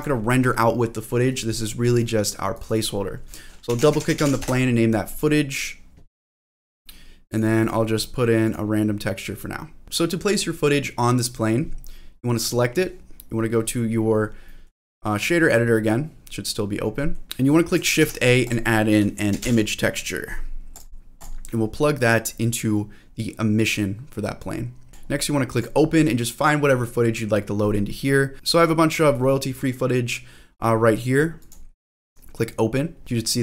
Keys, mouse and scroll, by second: 1.9 click, 2.5-4.9 drag, 3.9 o, 5.1 click, 6.4 click, 7.3 click, 7.6 click, 8.4 click, 9.8 click, 12.4 click, 13.7-14.5 scroll down 3, 14.5 middle click, 15.6-16.8 scroll up 2, 16.8 scroll up 1, 16.9 middle click, 18.0 shift+a, 21.7-22.4 scroll up 1, 22.4-24.9 drag, 24.9 middle click, 25.5 click, 33.0-33.4 scroll down 2, 33.3-33.4 scroll up 1.